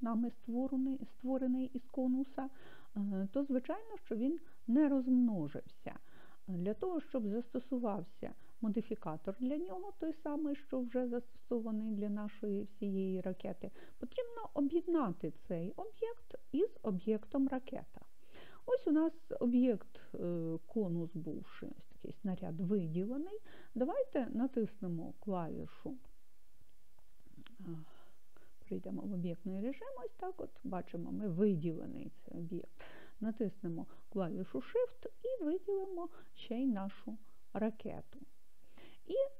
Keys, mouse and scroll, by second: 4.0-9.4 middle drag, 28.4 click, 35.6 shift+click.